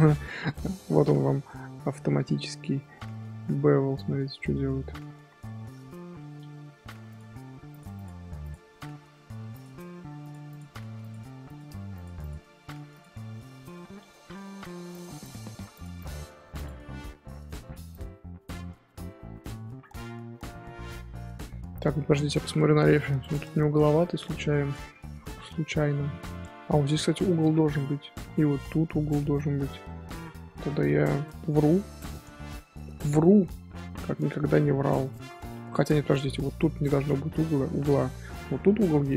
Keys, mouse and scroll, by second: 0.3 Tab, 0.5-1.0 middle drag, 1.0 scroll up 1, 1.1 Tab, 1.4-2.0 middle drag, 2.0 z, 2.3-2.7 middle drag, 2.7 z, 3.1-3.8 middle drag, 3.8 Tab, 4.5 middle click, 4.8 scroll up 1, 5.1 1, 5.4-7.1 shift+middle drag, 7.1 click, 7.9 click, 9.5 click, 10.4 click, 11.4 click, 12.2 click, 13.4-14.1 middle drag, 14.1 ctrl+z, 14.7 g, 15.2 click, 15.9 click, 18.7 scroll down 3, 19.0 scroll up 1, 19.1 scroll down 1, 19.1-22.2 middle drag, 29.8 middle click, 30.2 ctrl+z, 30.5-34.5 ctrl+z, 35.6-39.1 middle drag.